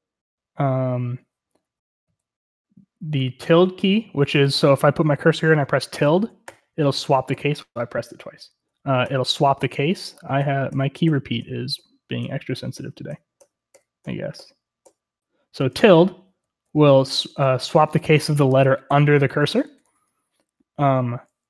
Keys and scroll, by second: 2.1 typing, 4.4 typing, 6.5-7.3 typing, 9.0-11.0 typing, 12.2-14.4 typing, 16.4-19.6 typing.